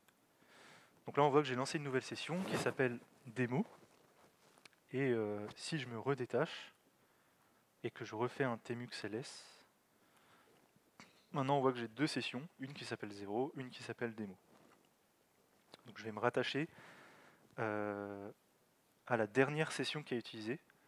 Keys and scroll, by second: 6.4 alt+x, 9.3 Up, 9.5 Up.